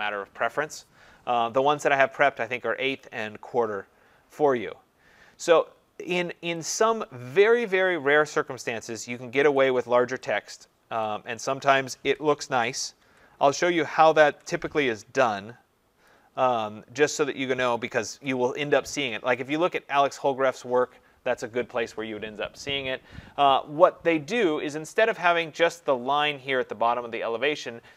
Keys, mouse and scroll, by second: 1.6-5.9 scroll, 5.9-6.6 scroll, 6.9 scroll, 7.4 click, 9.6 click, 11.1 click, 12.6 ctrl+=, 13.0 ctrl+=, 13.4 ctrl+=, 14.2 ctrl+=, 16.1 click, 18.1-20.8 ctrl+-, 20.3 click, 20.8 click, 21.2 click, 25.3 click.